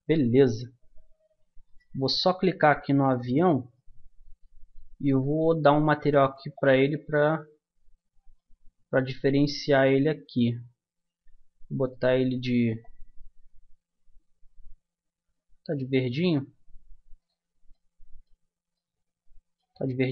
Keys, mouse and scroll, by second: 0.5-1.7 middle drag, 1.7-3.2 drag, 3.7-6.5 middle drag, 6.5-8.3 drag, 8.3-9.7 middle drag, 9.7-11.7 drag, 11.8-13.6 drag, 18.7-20.1 middle drag.